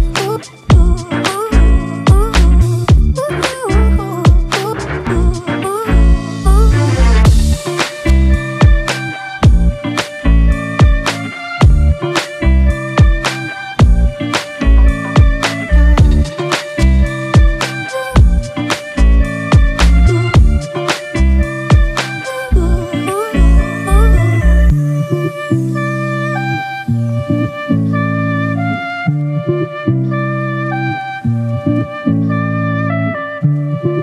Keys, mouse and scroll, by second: 10.8 ctrl+=, 11.0 ctrl+=, 11.4 space, 12.5 [, 14.4 ], 15.5 double click, 20.8 ctrl+-, 21.0 ctrl+-, 31.4 shift+click, 32.7 right click.